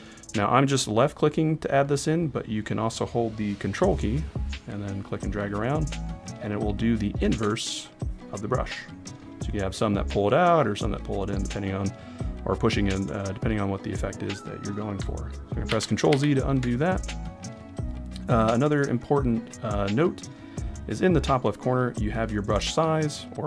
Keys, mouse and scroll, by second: 4.2 ctrl+click, 15.7 ctrl+z, 16.3 ctrl+z, 17.1-19.1 right drag.